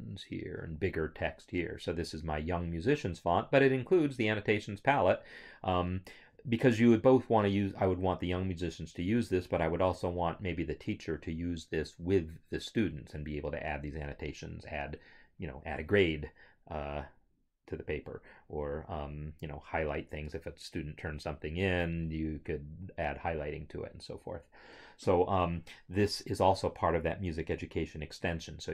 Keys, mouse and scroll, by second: 4.0 click.